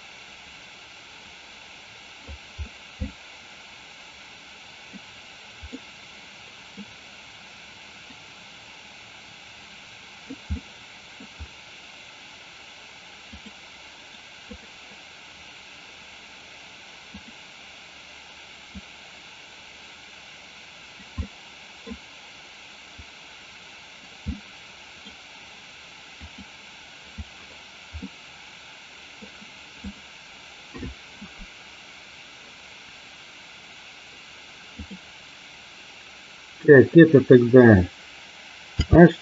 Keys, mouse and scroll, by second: 3.2-5.1 middle drag, 5.7-7.0 middle drag, 8.2-10.3 drag, 10.6-11.3 middle drag, 13.4 click, 14.0 right click, 17.3 click, 18.8-21.1 drag, 21.2 middle click, 23.2 click, 24.5-25.1 middle drag, 26.2 click, 28.1-29.3 middle drag, 34.8 click, 38.9 h.